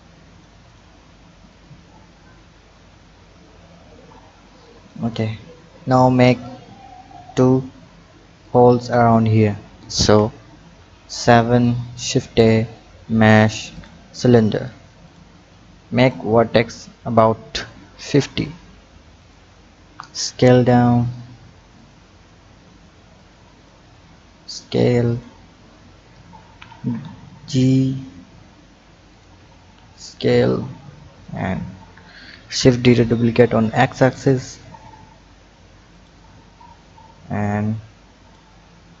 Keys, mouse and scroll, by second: 0.6 click, 1.5 click, 6.1 click, 8.4 click, 10.0 KP_7, 10.6-11.6 scroll up 3, 11.6-12.2 drag, 12.2 shift+a, 15.0-18.2 drag, 19.2 click, 20.2 s, 22.1-23.2 scroll up 2, 23.2 click, 24.0 s, 25.4-26.1 scroll up 2, 26.4 g, 29.4 s, 31.2-32.1 scroll down 3, 32.1 shift+d, 36.4-37.4 scroll down 2, 37.4 click.